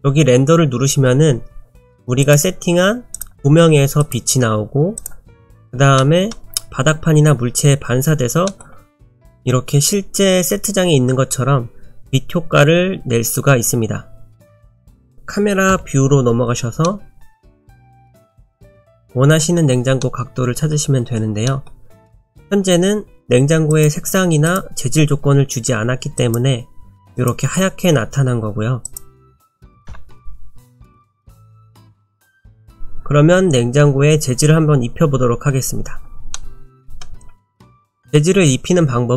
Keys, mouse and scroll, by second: 2.2 click, 3.1 click, 5.0 click, 5.5-6.8 scroll up 3, 6.0 middle click, 8.5 middle click, 8.9 middle click, 15.1-15.7 scroll down 1, 15.7 KP_0, 16.9 middle click, 17.7 middle click, 18.4-18.7 scroll up 1, 19.0 shift+middle click, 19.5-20.0 shift+scroll down 1, 20.0 middle click, 22.0 click, 23.7 click, 24.5 click, 27.1 click, 28.9 click, 29.9 KP_0, 30.9-31.7 scroll up 2, 31.1 middle click, 31.7-32.6 scroll down 2, 32.6 KP_0, 35.9-36.6 scroll up 3, 36.4 middle click, 37.9 click.